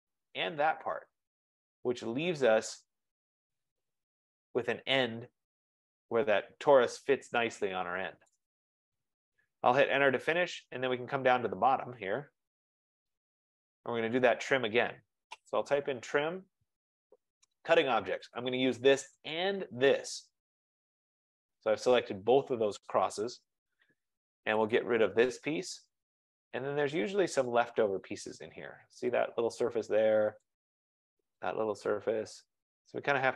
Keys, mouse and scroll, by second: 0.1 click, 1.3 middle click, 1.3 middle click, 8.3 right click, 9.9 Return, 11.0-11.8 scroll, 11.8-12.5 scroll down 8, 12.5-13.6 scroll up 9, 14.1-14.6 scroll up 1, 15.2-16.3 typing, 18.4 click, 18.6 scroll, 18.6 typing, 19.4 click, 23.4 Return, 24.8 click, 27.6 click, 29.2 click, 30.5 click, 31.6 click.